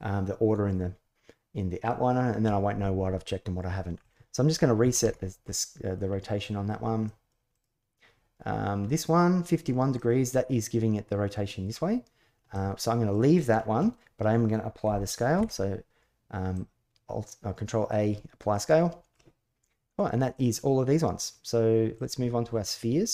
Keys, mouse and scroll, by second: 3.9-5.0 drag, 5.2 middle click, 6.1-6.5 middle drag, 6.8 middle click, 7.3 click, 8.6-9.4 middle drag, 9.7-10.2 middle drag, 12.3-12.9 middle drag, 15.1 ctrl+a, 18.3-18.9 middle drag, 20.1 click, 21.7 click, 22.5-23.0 middle drag.